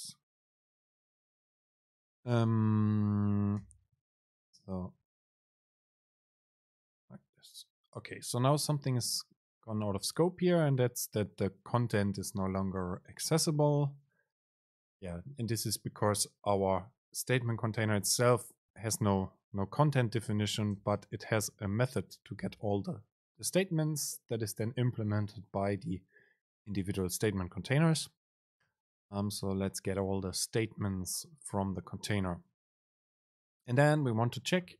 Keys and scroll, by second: 21.0 super+space.